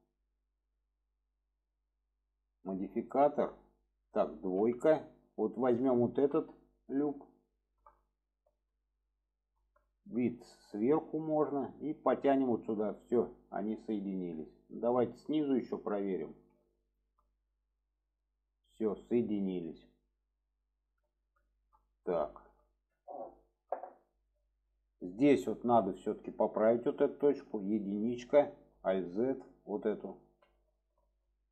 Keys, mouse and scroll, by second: 5.8 alt+shift+click, 6.7-7.4 middle drag, 7.6 shift+middle drag, 8.0-9.5 alt+middle drag, 9.8 shift+middle drag, 10.3-11.0 middle drag, 11.9-13.2 drag, 13.6 click, 14.2-15.1 middle drag, 16.2 click, 16.8 alt+shift+click, 18.0-18.9 drag, 19.4 click, 20.0-21.2 middle drag, 21.5 shift+middle click, 22.3 shift+middle click, 23.4 shift+middle click, 24.3-25.0 middle drag, 25.8 middle click, 28.7 alt+z, 30.5-31.2 middle drag.